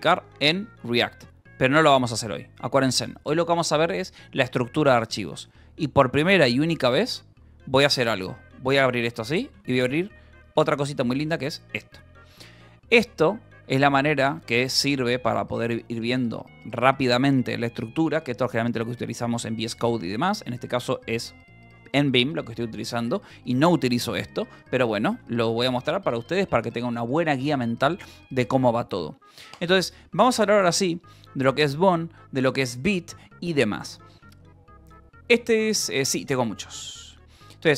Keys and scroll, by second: 1.4 Return, 2.6 :, 7.9 j, 8.3 Return, 9.3 space, 9.4 r, 10.0 Escape, 10.9-15.2 typing, 12.8 Return, 15.9 Return, 16.3 j, 25.1 k, 25.8 j, 26.2 k, 33.5 shift+k.